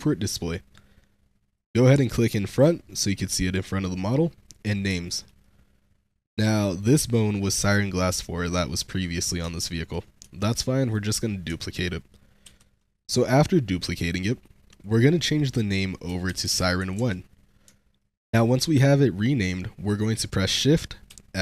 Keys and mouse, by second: 0.1 middle click, 1.5 click, 2.1 click, 2.3-4.4 drag, 4.9 shift+click, 5.3-6.7 drag, 7.0 click, 9.5-9.8 shift+drag, 10.1 Tab, 10.7 click, 12.3 shift+d, 14.6 click, 15.3-16.9 drag, 17.9-18.4 shift+middle drag, 21.0 shift+s.